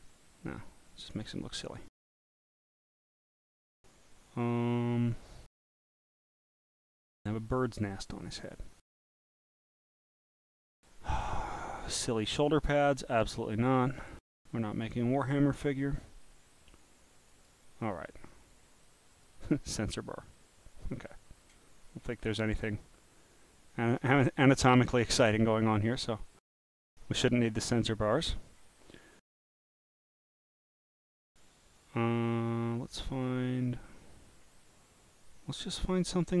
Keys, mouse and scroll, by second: 0.4 click, 2.1-2.4 scroll up 1, 2.4-3.4 scroll down 6, 6.8 click, 7.9 click, 9.9 click, 12.3 click, 13.0 click, 14.7 click, 16.0 click, 17.3 click, 19.1 click, 20.1 click, 20.9 click, 21.9 scroll up 5, 22.3 scroll down 4, 22.6-23.9 drag, 24.1-24.6 scroll down 1, 24.6 click, 28.4 scroll down 1, 29.6-30.1 scroll, 33.1-33.6 scroll down 3, 33.6 scroll down 1, 34.3 scroll down 1, 35.6-36.4 scroll down 1.